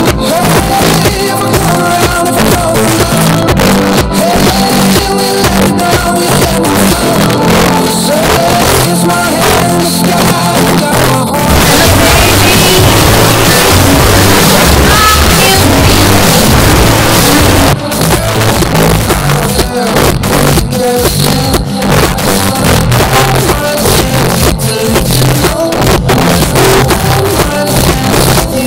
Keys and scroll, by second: 17.6 Page_Down.